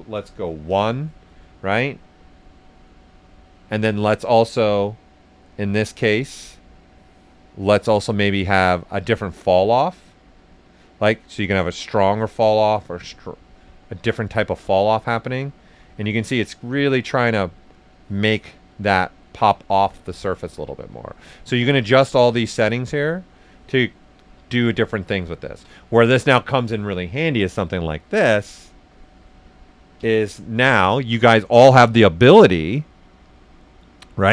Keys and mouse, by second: 0.1 1, 0.6 Return, 1.5 click, 2.2-3.7 right drag, 3.7 ctrl+z, 4.6 click, 8.2-12.4 drag, 12.4 click, 13.2-15.2 right drag, 15.2 right click, 16.4 click, 17.3-18.7 right drag, 20.1 ctrl+z, 20.9-23.4 drag, 24.0 right click, 25.4 ctrl+z, 25.7 right click, 26.0 alt+right click, 29.9 b.